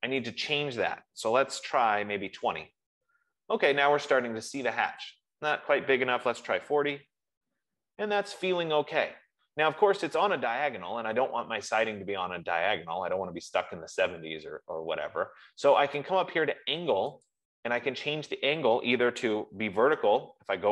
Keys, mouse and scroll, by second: 1.9-2.7 typing, 2.8 Tab, 5.5 click, 6.6 typing, 6.9 Tab, 17.6 click.